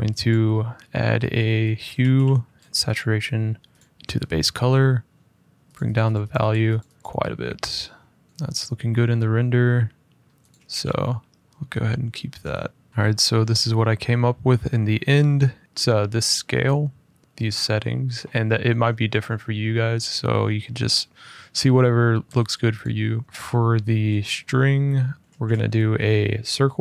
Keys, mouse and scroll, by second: 0.0 click, 1.7 typing, 2.8 click, 3.5 click, 5.5 click, 5.7 click, 5.9 click, 6.0 click, 6.2 click, 6.5 click, 6.7 click, 6.9 click, 7.0 click, 8.2 click, 9.9 middle click, 10.2 click, 10.5 f, 11.9 middle click, 12.8 shift+middle click, 12.9 scroll up 1, 14.9 middle click, 15.5 middle click, 17.2-20.5 middle drag, 21.0-21.6 middle drag, 22.5 click, 23.1 middle click, 23.2 shift+middle click, 23.6 middle click, 24.1 middle click, 24.8 middle click, 25.2 middle click, 25.2 a, 26.2 click.